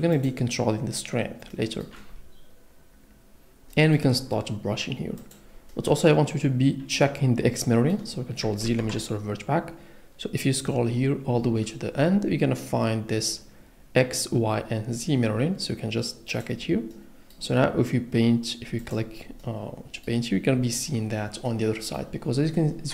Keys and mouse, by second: 9.1 ctrl+z, 16.3 click, 19.4 click.